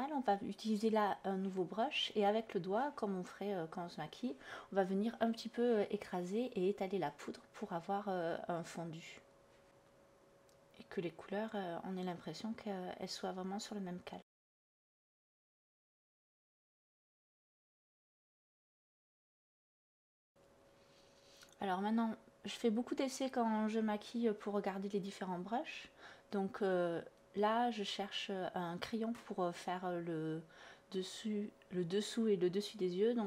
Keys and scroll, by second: 1.5 space, 2.6 space, 15.5 b, 23.5 ctrl+z, 24.0 ctrl+z, 26.0 ctrl+z, 26.8 ctrl+z, 29.4 /, 30.2 /.